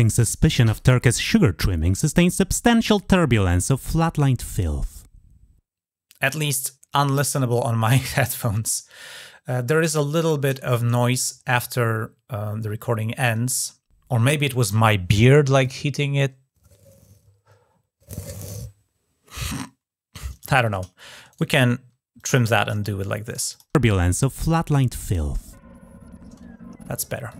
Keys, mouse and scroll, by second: 20.1 click, 21.1 shift+right click, 22.0 click, 23.1 click, 23.3 click, 26.4 scroll down 1, 27.1 click.